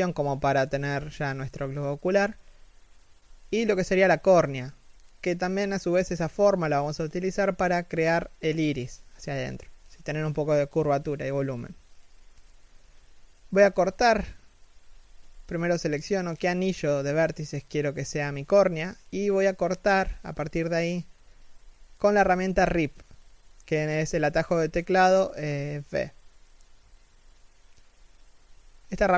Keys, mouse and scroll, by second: 0.0-0.8 scroll up 1, 3.8 3, 4.3 z, 5.4 alt+shift+middle click, 13.2 scroll down 1, 13.5 z, 13.9 alt+right click, 17.0 scroll down 1, 17.1 middle click, 18.1 3, 18.8-19.4 scroll up 1, 19.4 alt+right click, 21.0-21.4 scroll down 1, 21.4 middle click, 23.6 3, 23.7 z, 24.1-26.1 scroll up 1.